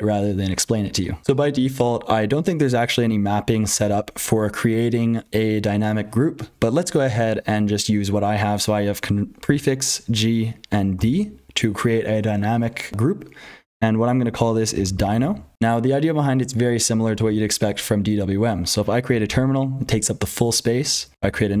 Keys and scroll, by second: 0.0-21.6 typing, 1.2 alt+x, 1.2 Return, 1.2 super+h, 1.2 F12, 9.4 ctrl+z, 19.0 ctrl+z.